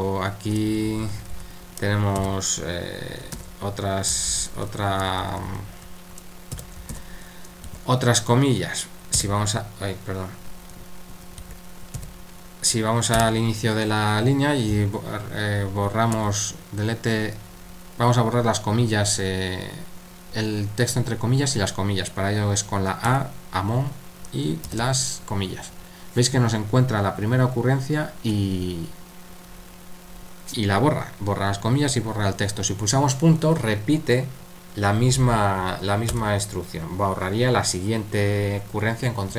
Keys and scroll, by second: 0.0-9.6 typing, 11.4 Escape, 11.7-12.5 typing, 13.7-14.4 typing, 16.1 d, 23.1 typing, 24.7 typing, 36.1 typing.